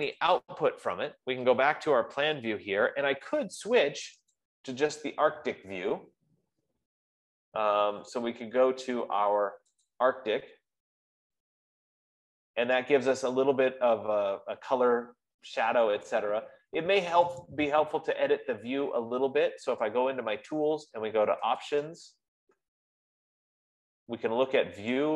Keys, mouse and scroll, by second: 0.6 click, 1.5 click, 4.9 click, 10.4-15.3 drag, 18.0-22.1 drag.